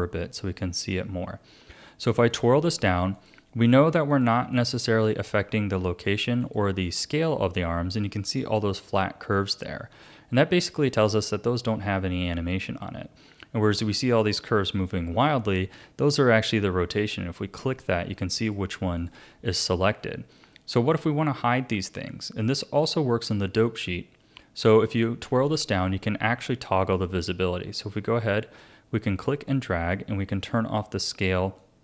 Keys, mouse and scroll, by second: 0.1 a, 2.3 click, 3.1 click, 4.1 click, 4.5 click, 5.0 click, 6.1 click, 6.4 click, 6.8 click, 17.0 click, 17.6 click, 18.4 click, 19.0 click, 19.5 click, 24.8 click, 28.0-31.8 drag.